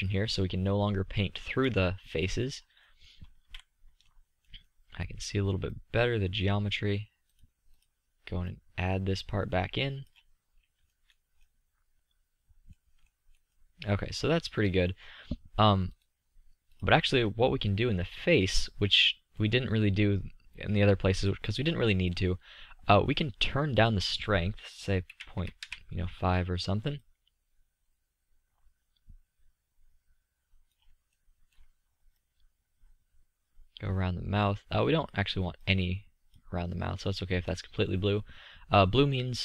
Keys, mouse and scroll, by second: 1.5-2.7 middle drag, 3.2 z, 4.7-7.0 middle drag, 11.4 middle click, 12.3-13.0 middle drag, 13.3 middle click, 13.9-15.6 middle drag, 17.4 click, 17.9-20.9 middle drag, 25.5-27.1 middle drag, 28.6-33.9 middle drag, 35.6-38.9 middle drag, 39.3-39.4 middle drag.